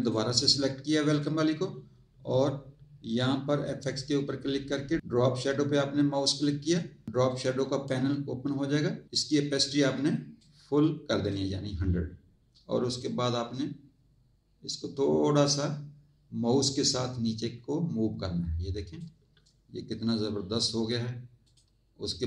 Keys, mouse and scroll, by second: 0.0 click, 1.1 click, 3.8 click, 6.1 click, 7.3 click, 10.4 click, 13.0 click, 20.2 click, 21.4 click.